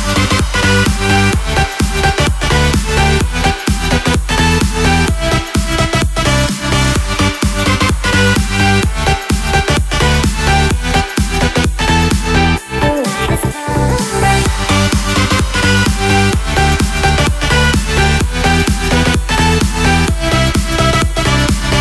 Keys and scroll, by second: 16.6 ctrl+t.